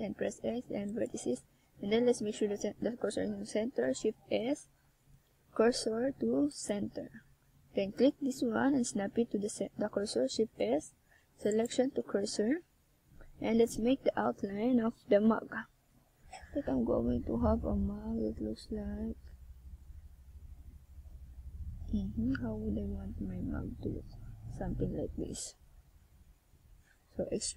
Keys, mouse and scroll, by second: 6.9 ctrl+r, 11.7 click, 12.2 Tab, 12.4 middle click, 13.0 Tab, 13.4 right click, 13.9 shift+right click, 14.3 shift+right click, 15.0 right click, 16.5 middle click, 19.0 middle click, 27.2 KP_1.